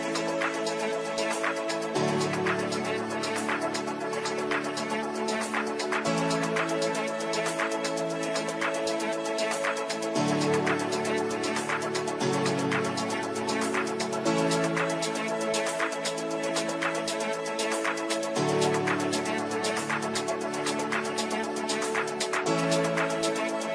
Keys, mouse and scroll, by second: 0.0-10.1 drag, 10.1-11.6 drag, 11.9 c, 12.5 click, 15.5 right click, 17.0-19.0 shift+drag, 18.8-19.7 typing, 19.8 click, 20.4 F3, 21.2-22.6 drag, 22.6-23.7 alt+drag.